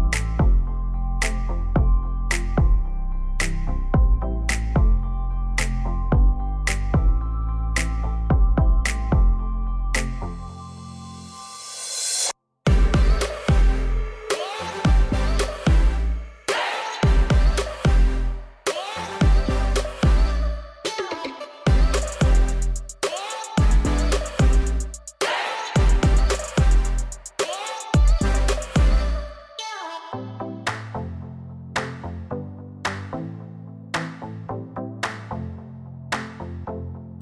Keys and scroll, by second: 19.5 ctrl+d, 34.6 d, 35.8 d.